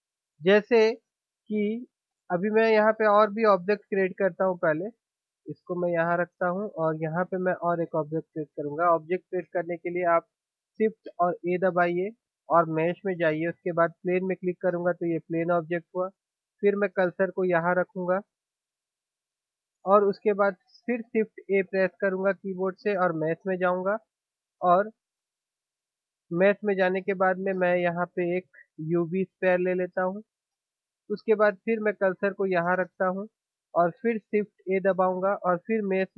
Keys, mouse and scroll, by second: 6.0-7.3 middle drag, 7.3 click, 11.6 shift+a, 17.6-21.0 middle drag, 22.2 shift+a, 32.8-34.4 drag, 34.4 shift+a.